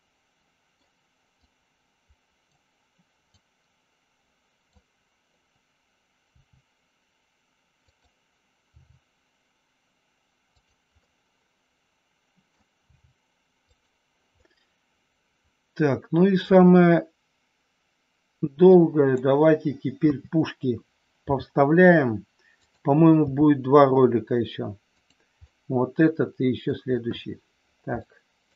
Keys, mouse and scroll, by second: 1.3-2.3 drag, 3.3-4.7 drag, 6.3 r, 7.8 click, 8.7 g, 10.5 click, 11.1-12.5 middle drag, 12.8 g, 13.6 click, 14.3 scroll up 1, 14.5-16.5 middle drag, 18.6 click, 20.1 KP_3, 21.2 g, 22.6 click, 23.1 r, 25.3-26.6 middle drag, 28.0 shift+middle click.